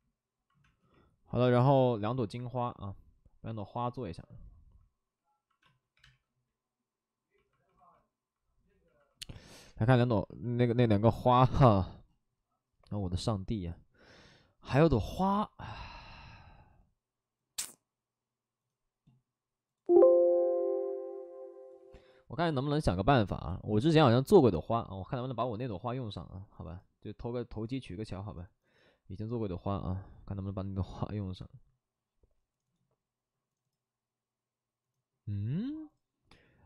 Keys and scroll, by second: 0.6 space, 1.4 space, 5.6 space, 5.9 3, 5.9 space, 9.6 space, 15.1 space.